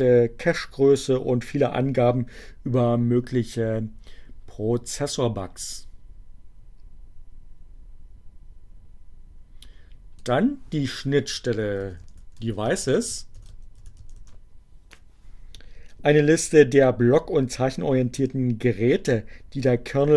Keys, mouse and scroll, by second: 4.9-9.8 drag, 10.9-14.4 typing.